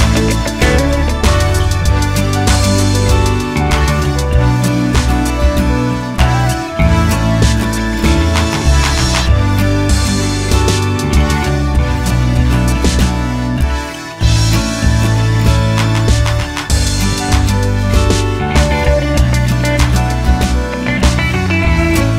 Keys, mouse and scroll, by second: 0.1-0.6 middle drag, 0.6 scroll down 1, 1.1 middle click, 2.3 r, 3.5 click, 3.7 middle click, 5.1 r, 6.1 click, 6.7-7.8 middle drag, 6.7 r, 7.8 click, 8.1-10.5 middle drag, 8.4 g, 10.5 click, 10.7-12.4 middle drag, 12.4 click, 13.6-16.2 middle drag, 16.2 click, 16.9-22.1 middle drag, 18.5 g, 20.8 r.